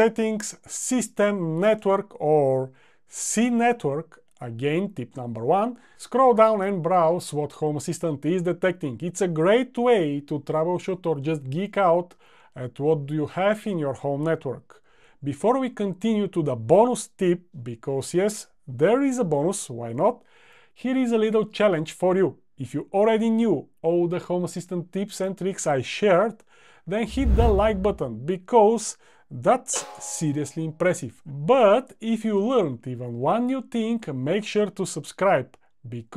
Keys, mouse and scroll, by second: 2.5-4.3 typing.